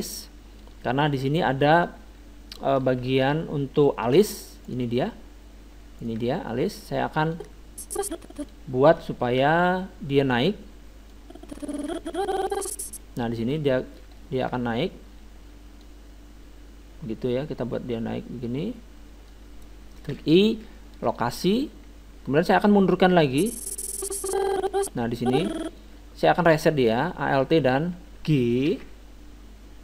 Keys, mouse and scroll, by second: 0.2-2.6 middle drag, 1.8-4.7 drag, 3.1 middle click, 4.7-7.3 right drag, 7.3 middle click, 8.0-9.1 drag, 9.2-10.9 middle drag, 11.1-12.8 drag, 13.5-15.8 middle drag, 15.8-17.5 drag, 20.1 i, 23.3-25.2 drag, 28.7 alt+g.